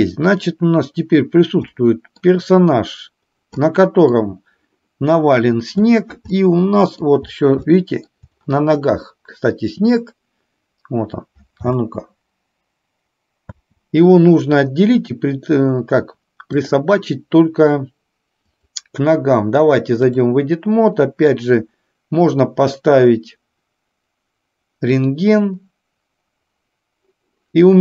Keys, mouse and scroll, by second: 1.8-2.5 middle drag, 3.8-4.3 middle drag, 6.5-7.1 middle drag, 7.8-8.2 shift+middle drag, 9.3 middle click, 11.8 space, 16.7 click, 18.5-20.3 drag.